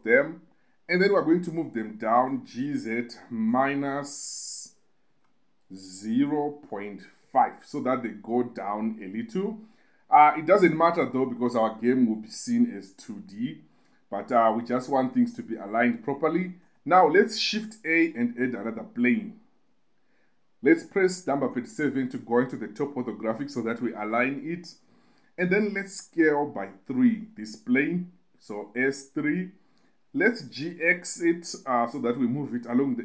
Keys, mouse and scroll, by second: 0.0 shift+click, 1.5 KP_2, 2.6 g, 2.9 z, 5.5 -, 6.6 0, 7.0 ., 7.6 5, 8.4 click, 14.0 KP_8, 15.5 KP_8, 17.0 KP_8, 18.1 shift+a, 21.8 KP_7, 26.4 s, 27.5 3, 29.5 click, 30.8 g, 31.1 x.